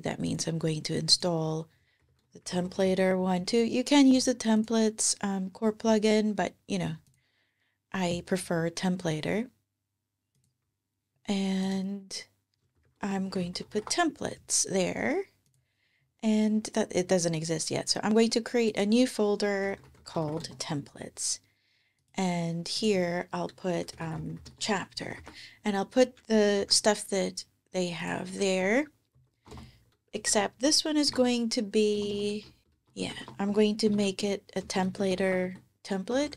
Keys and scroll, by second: 1.6-3.0 typing, 12.3-13.9 typing, 19.2-20.4 typing, 23.4-24.7 typing, 25.0 super+v, 26.4 alt+super+s, 28.4 alt+shift+Left, 29.0 alt+shift+Left, 29.3 alt+shift+BackSpace, 30.0-36.3 typing.